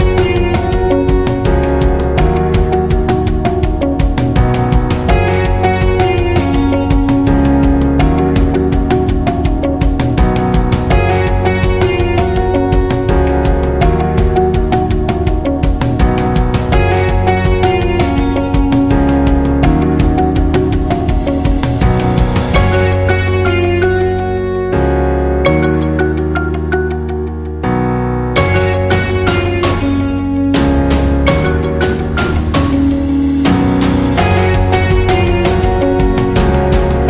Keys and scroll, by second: 17.3-18.4 space.